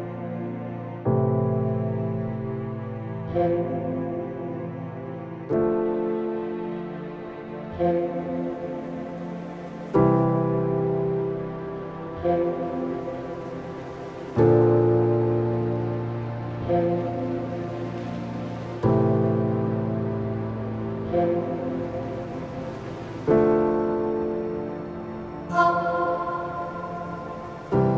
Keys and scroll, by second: 1.8 space, 6.0 space, 11.1 ctrl+z, 15.4 space, 20.3 ctrl+=.